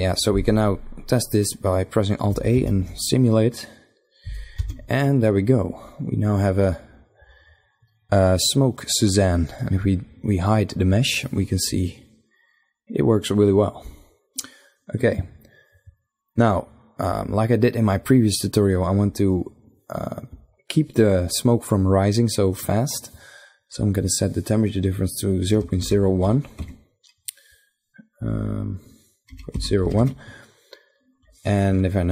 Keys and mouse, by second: 2.5 alt+a, 4.4 alt+a, 8.3-10.5 middle drag, 10.5-12.3 drag, 12.3 middle click, 14.4-18.7 middle drag, 18.7-20.6 drag, 23.5 click, 27.9-30.2 drag, 31.3 shift+Left, 32.0 shift+Left.